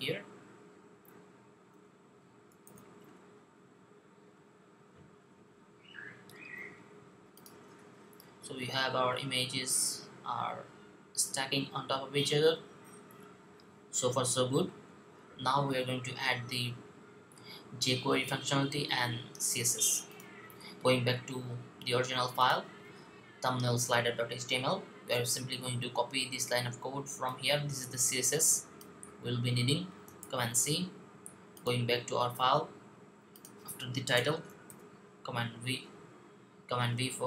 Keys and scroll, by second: 2.6 super+v, 30.0 super+c, 34.5 v.